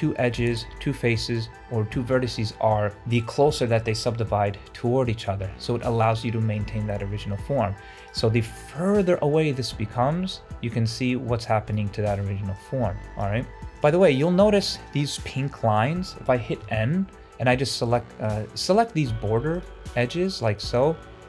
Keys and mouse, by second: 2.8 middle click, 7.1 middle click, 7.9 click, 8.8-11.6 drag, 12.5 click, 13.5 ctrl+z, 13.8 Tab, 14.3 Tab, 16.6 n, 18.2 click, 19.5 alt+click, 20.6 alt+shift+click.